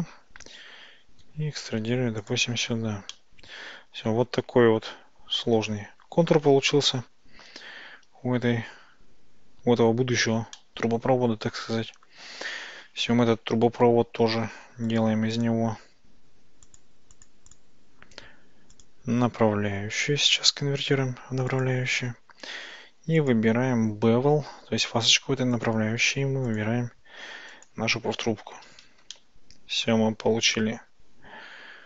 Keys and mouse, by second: 0.5 e, 2.3 ctrl+click, 3.2-5.5 middle drag, 7.5 Tab, 10.6-12.1 middle drag, 14.9 click, 15.4-15.9 drag, 16.7 click, 17.2 click, 17.5 click, 18.9-21.7 drag, 23.3 drag, 25.6 click, 26.5-27.7 drag, 29.2-29.9 shift+middle drag.